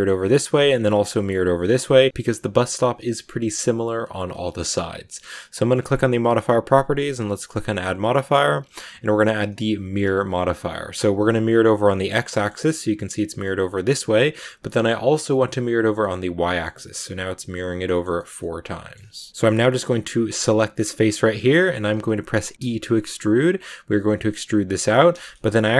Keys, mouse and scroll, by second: 1.6 scroll down 2, 1.8 shift+middle click, 5.8 click, 7.3-10.3 drag, 12.2-14.8 middle drag, 14.8 click, 15.8-19.3 middle drag, 19.3-20.3 scroll up 2, 20.3 right click, 20.8 middle click, 21.2 scroll up 2, 21.9-22.5 scroll down 1, 22.5 e, 25.0 shift+scroll down 1, 25.1 shift+middle click, 25.5-25.7 scroll up 1.